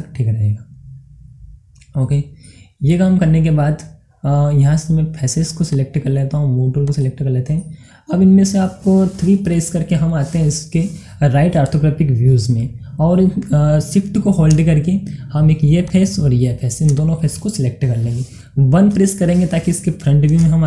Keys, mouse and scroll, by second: 2.5-5.4 middle drag, 5.7 click, 5.7 click, 7.6-10.3 middle drag, 11.3 middle click, 11.5-12.2 scroll up 1, 12.2 scroll down 1, 15.0 shift+Num_Lock, 15.0-15.9 scroll down 1, 15.9 shift+click.